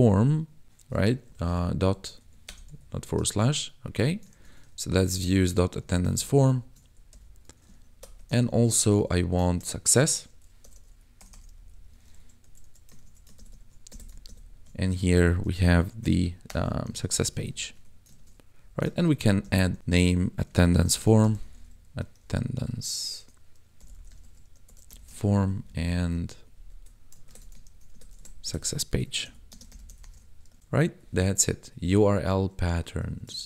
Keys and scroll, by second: 1.3 ctrl+Left, 2.2 Right, 2.4 BackSpace, 2.7 ., 3.3 ctrl+s, 3.8 Escape, 4.3 ctrl+s, 4.7 ctrl+Right, 5.8 Left, 6.8 Right, 7.1 ,, 7.9 alt+shift+Down, 8.4 ctrl+Left, 9.4 ctrl+shift+Left, 10.2 s, 11.2 BackSpace, 11.5 c, 13.0 ctrl+s, 13.3 ctrl+Right, 13.9 Right, 15.4 s, 16.4 BackSpace, 16.8 c, 17.7 Tab, 18.2 ctrl+s, 18.5 Up, 18.9 ctrl+Right, 19.4 Left, 19.8-24.9 typing, 25.1 ctrl+s, 25.4 Down, 25.6 Right, 26.3 Escape, 26.5 Down, 26.7 Right, 27.2 ctrl+shift+Right, 27.6 ctrl+c, 27.9 Right, 29.2-30.1 typing, 30.6 ctrl+s, 33.0 e, 33.3 ctrl+s.